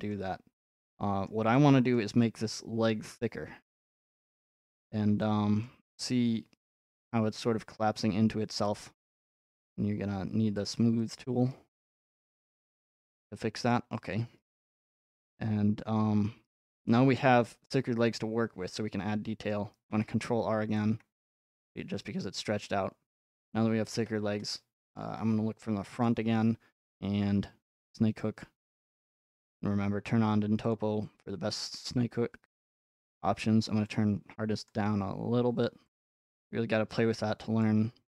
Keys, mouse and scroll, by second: 1.3-4.0 middle drag, 4.8 click, 5.1-5.9 scroll, 7.4-7.7 scroll, 9.6 click, 10.1 f, 10.7 click, 11.8 middle click, 12.7-16.5 middle drag, 19.5-20.6 middle drag, 21.1-24.0 middle drag, 26.0-28.2 drag, 29.2-32.8 drag, 33.1-36.8 drag, 37.6-38.1 drag.